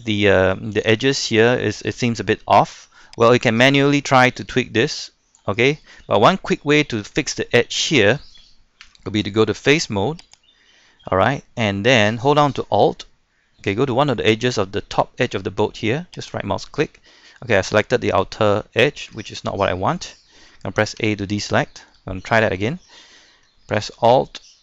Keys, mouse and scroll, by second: 0.1 shift+middle click, 0.7-1.5 scroll up 1, 1.5 middle click, 2.1 shift+middle click, 3.3 right click, 4.4-5.6 drag, 5.6-6.1 scroll down 1, 6.1 shift+middle click, 7.3 shift+middle click, 8.0 shift+middle click, 9.1 ctrl+Tab, 10.2 click, 10.6-11.1 scroll up 1, 11.2 shift+middle click, 16.2 alt+right click, 19.3 middle click, 20.1 shift+middle click, 21.0 a, 21.9 shift+middle click.